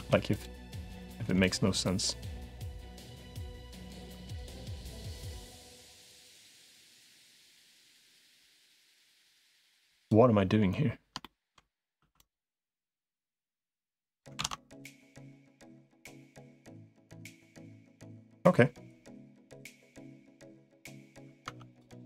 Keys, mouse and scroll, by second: 0.1 click, 1.3-2.7 drag, 3.9 2, 4.1 click, 6.1-7.5 drag, 7.7 click, 8.2 middle click, 9.7 3, 11.0 shift+middle click, 11.9 1, 12.7-14.1 drag, 14.3 ctrl+z, 15.5-16.7 drag, 17.9-19.1 drag, 20.5 click, 21.3 Tab, 21.8 middle click.